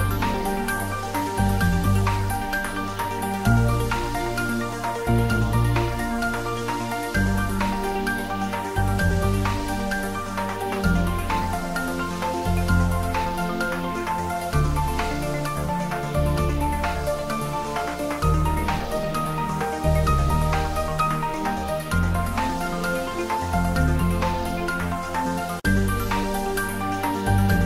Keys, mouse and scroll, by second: 1.0 click, 2.3 middle click, 2.8 click, 3.6 middle click, 4.4 click, 5.9 Return, 7.1-8.5 drag, 9.3 Return, 14.4 click, 15.5 Return, 16.9 Return, 17.0 ctrl+s, 18.9 middle click, 19.5 middle click, 20.2 middle click, 20.9-22.6 drag, 24.6-26.0 middle drag, 26.0 click, 26.7 Return.